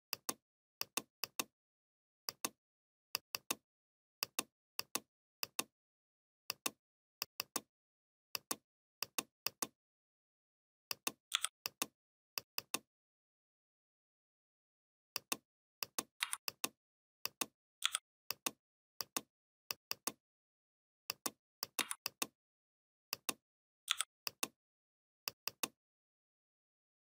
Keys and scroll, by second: 11.1 i, 16.0 v, 17.6 i, 21.6 v, 23.7 i.